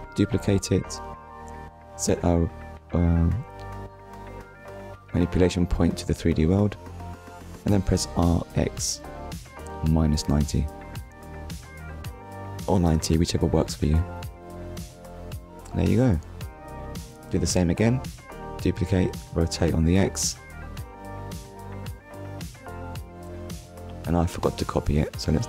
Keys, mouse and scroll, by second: 0.1 click, 0.9 click, 1.6 middle click, 4.2 r, 5.6 9, 9.7 r, 12.0 Return, 13.0 click, 13.3 middle click, 14.6 scroll down 1, 15.1 middle click, 16.5 click, 18.1 r, 22.2 Return, 22.8 click, 23.2 middle click.